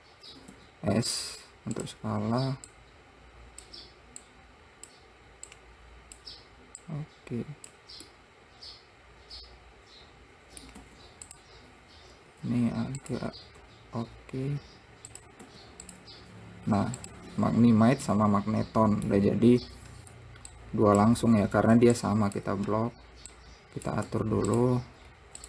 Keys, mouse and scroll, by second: 0.9 s, 3.1 click, 4.6 click, 5.9 click, 7.2 click, 8.5-11.2 middle drag, 11.2 `, 12.8 `, 14.0 r, 15.8 `, 17.1-17.4 scroll down 1, 17.4 click, 17.9-18.5 scroll down 1, 18.5-19.9 middle drag, 19.9-20.9 scroll down 1, 20.9 click, 22.4 shift+click, 23.7 click.